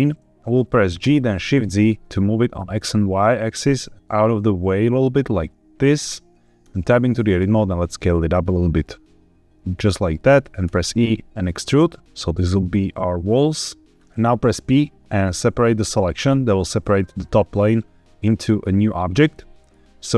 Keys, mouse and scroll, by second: 0.9 g, 1.4 shift+z, 5.8 click, 6.5 Tab, 7.3 s, 9.7 click, 10.0 middle click, 10.5 e, 13.9 click, 14.5 p, 19.2 middle click.